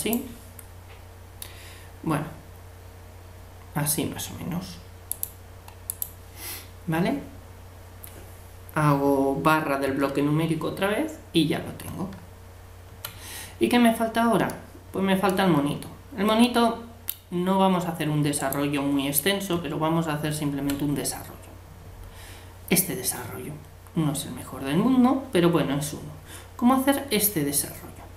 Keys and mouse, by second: 5.1-7.0 drag, 12.1 Tab, 18.4-19.5 right drag, 19.5 Tab.